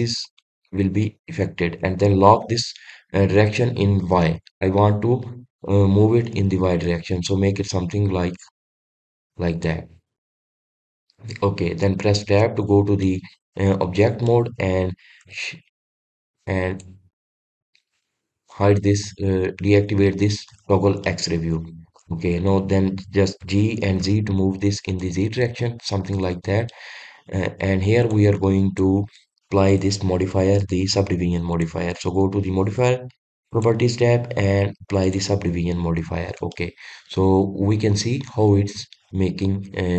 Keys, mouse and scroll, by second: 10.1 click, 10.6-12.9 middle drag, 12.9 Tab, 13.6-17.3 middle drag, 17.3-20.5 drag, 21.6-23.0 middle drag, 23.0 drag, 24.0 g, 26.2-26.6 scroll down 2, 26.6-27.7 middle drag, 27.7 scroll up 2, 28.0-28.6 scroll down 2, 28.6 click, 29.3 drag, 32.0 click, 35.8-36.3 drag, 36.3 scroll up 1, 36.6-37.1 scroll down 1, 37.1-39.9 middle drag.